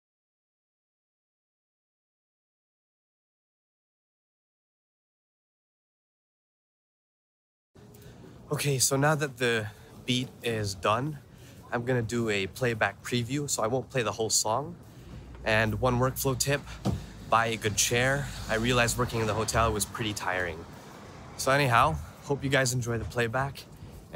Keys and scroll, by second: 0.7 super+f, 1.1 super+f.